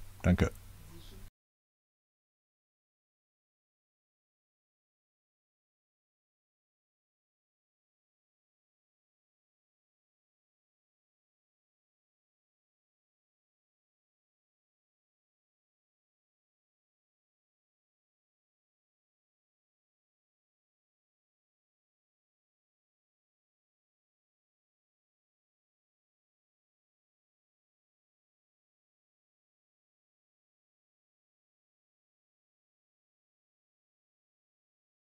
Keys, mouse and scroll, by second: 1.7 click, 2.5 click, 4.5 click, 6.8 click, 7.1-8.4 typing, 10.1 click, 11.8 right click, 12.9 click, 14.5-15.6 drag, 16.1 click, 17.1 click, 19.2 click, 21.2-23.1 drag, 26.8 click, 28.2 click, 29.7 click, 30.7 click, 31.4-33.7 typing, 34.3 click.